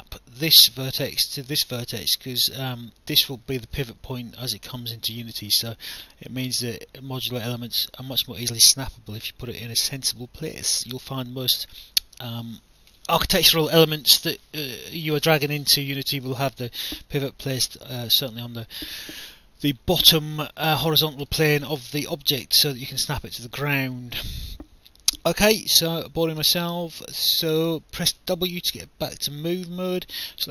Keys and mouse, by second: 10.0 alt+click, 21.4 alt+click, 23.3 alt+click, 26.1 alt+click, 28.1 w.